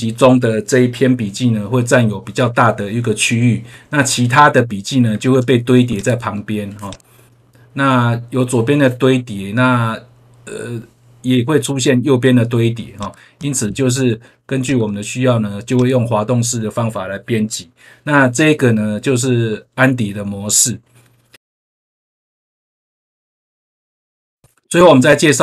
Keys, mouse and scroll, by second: 5.8 click, 6.8 click, 12.9 click, 14.6 click, 15.7 click.